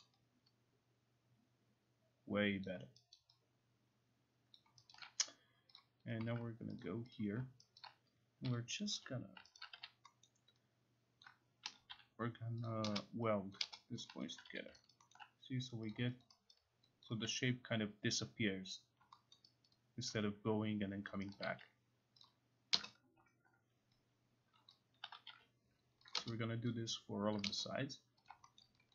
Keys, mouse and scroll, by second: 0.0 alt+middle click, 2.7 alt+click, 3.2 alt+right click, 4.6 alt+click, 4.9 alt+right click, 5.8 click, 6.8 click, 7.2 click, 7.8 alt+right click, 8.5-9.8 typing, 9.6 alt+right click, 10.3 scroll, 11.2 click, 11.7 m, 12.7 click, 13.6 click, 14.1 click, 14.4 alt+click, 14.5 q, 15.0 alt+right click, 15.2 alt+middle click, 15.9 click, 16.2 alt+click, 16.6 alt+right click, 17.6 alt+click, 19.0 alt+click, 19.4 alt+middle click, 19.7 alt+right click, 20.1 alt+click, 21.1 alt+click, 21.4 alt+right click, 22.2 click, 23.5-24.7 alt+middle drag, 24.7 click, 25.1 typing, 26.1 click, 27.4 click, 28.6 alt+middle click.